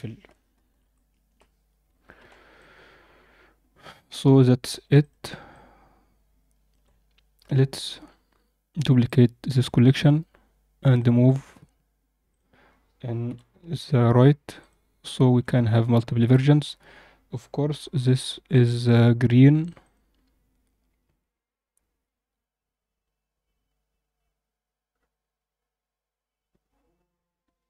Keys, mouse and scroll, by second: 0.6 0, 2.1 alt+a, 2.5-4.6 alt+middle drag, 4.9 click, 5.4-6.7 middle drag, 6.8-7.3 scroll down 1, 7.3 KP_7, 8.7 click, 9.0-9.9 right drag, 10.8 click, 11.2-12.3 right drag, 13.2 g, 14.9 scroll up 2, 15.2 alt+a, 16.2 click, 18.5 click, 18.7 click, 19.7-27.6 drag.